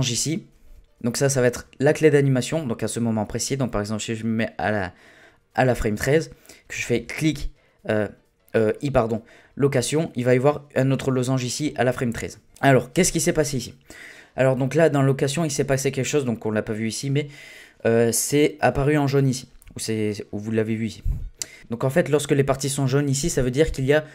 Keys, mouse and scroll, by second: 6.9 i, 12.5-14.3 drag.